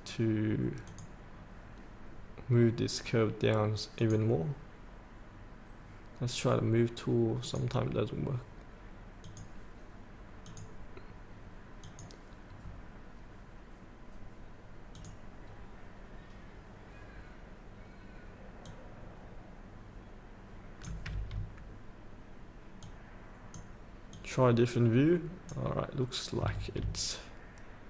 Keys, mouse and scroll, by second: 0.9-19.9 drag, 20.0 click, 22.8-26.0 drag.